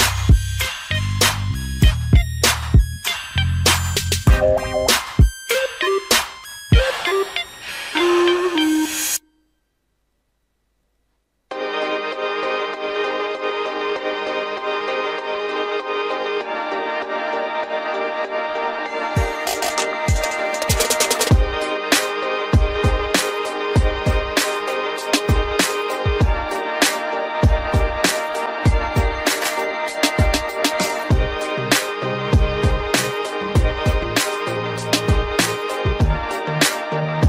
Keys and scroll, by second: 22.2 ctrl+t.